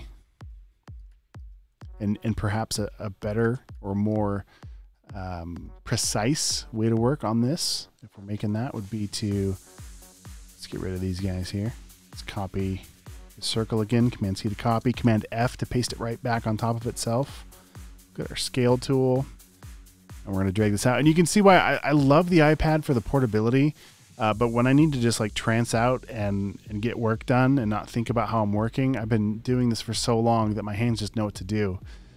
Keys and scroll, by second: 1.1 space, 3.5 space, 4.2 space, 12.0 BackSpace, 14.4 super+c, 17.2 e, 23.6 b, 26.7-27.4 typing, 28.6 space, 29.1 super+space, 29.7 space, 30.0 space.